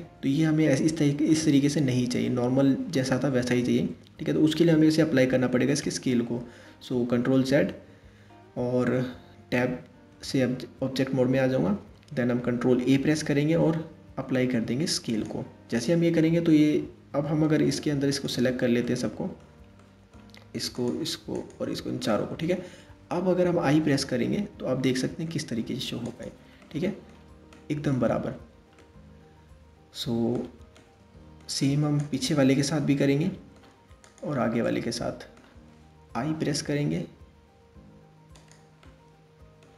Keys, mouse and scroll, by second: 6.6 ctrl+z, 9.7 Tab, 12.6 ctrl+a, 16.7 Tab, 17.7 shift+click, 18.4-20.4 middle drag, 20.4 shift+click, 21.0 shift+click, 21.7-23.1 middle drag, 26.2-31.6 middle drag, 31.6 click, 32.7 middle click, 33.6 shift+click, 34.3-35.8 middle drag, 35.8 i, 38.5-39.7 middle drag.